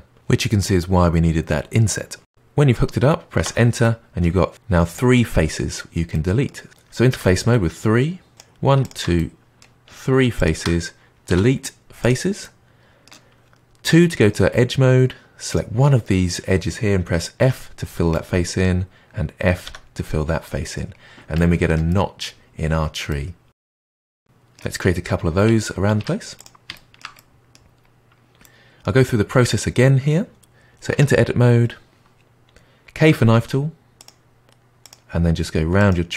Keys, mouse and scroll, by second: 3.8-6.7 middle drag, 6.7 click, 7.1 3, 8.8 shift+click, 9.1-10.3 middle drag, 10.3 shift+click, 11.3 Delete, 12.4-13.8 middle drag, 13.8 2, 15.5 click, 17.3 f, 18.1-19.6 middle drag, 19.6 f, 20.4-20.9 middle drag, 20.9-21.8 scroll down 1, 21.8-25.3 middle drag, 25.9 Tab, 26.3 click, 26.7-27.7 shift+middle drag, 27.7-28.3 scroll up 4, 28.4-30.9 middle drag, 30.9 Tab, 33.0 k.